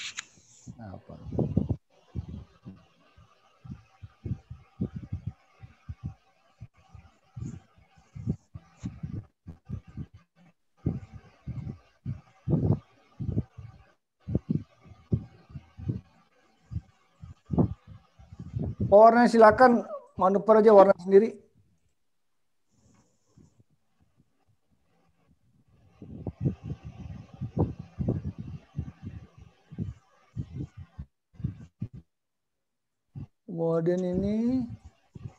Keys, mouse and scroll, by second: 2.0 click, 4.9 click, 7.6 click, 11.8 click, 12.0 click, 12.6 click, 14.2 click, 16.6 click, 19.4 click, 21.9 click, 24.5 click, 26.0 click, 28.5 scroll up 4, 28.7 scroll down 1, 31.0 scroll down 1, 31.8 scroll down 1, 34.0 click.